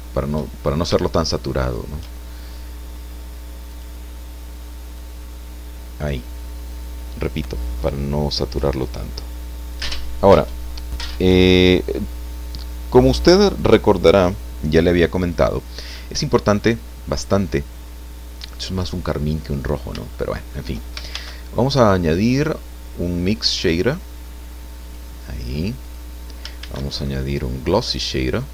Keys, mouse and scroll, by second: 0.6-1.3 shift+scroll up 1, 1.3 shift+middle click, 3.7 click, 5.0-6.3 drag, 20.1 shift+middle click, 21.1 shift+a, 24.8 click, 25.8 click, 26.6 shift+a.